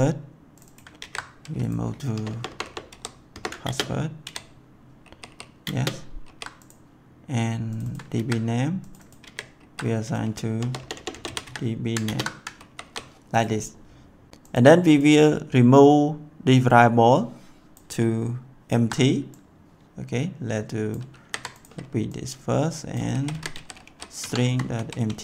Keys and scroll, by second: 1.0 ctrl+v, 2.1 BackSpace, 2.9 w, 3.3 BackSpace, 3.6 ctrl+space, 4.2 ctrl+v, 5.0 ctrl+s, 5.6 ctrl+space, 6.2 ctrl+s, 8.1 ctrl+c, 9.1 ctrl+v, 9.5 ctrl+s, 10.5-11.9 typing, 12.0 ctrl+space, 12.5 ctrl+s, 21.0 ctrl+c, 22.9-24.7 typing, 24.1 Tab, 25.0 Tab.